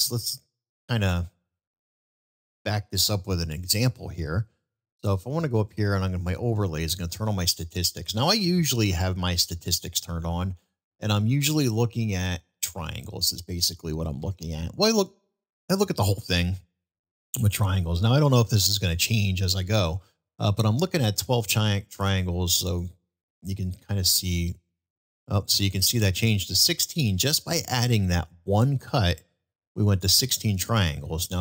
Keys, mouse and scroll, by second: 0.3 middle click, 0.7 click, 2.2 ctrl+z, 5.7-7.2 drag, 9.1 middle click, 16.3-16.7 middle drag, 23.8 ctrl+b.